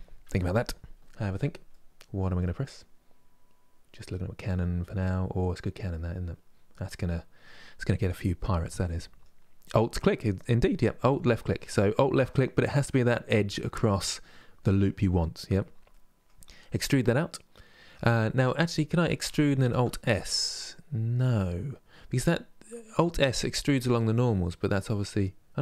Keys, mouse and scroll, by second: 1.4-2.0 scroll down 1, 2.0-11.3 middle drag, 11.3 alt+click, 12.0-18.7 middle drag.